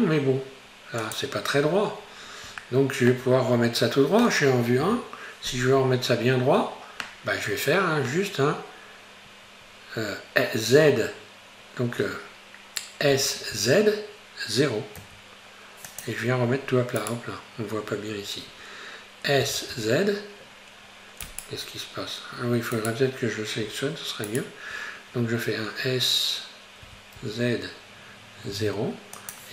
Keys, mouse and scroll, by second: 1.6-2.6 scroll up 2, 2.6-4.8 shift+middle drag, 4.8 KP_1, 5.9-7.0 scroll up 3, 7.0-8.3 scroll down 4, 8.3-10.7 scroll down 1, 10.7 z, 13.5 z, 17.1 right click, 19.5 s, 19.7 z, 22.9 Right, 24.3 shift+right click, 26.9 s.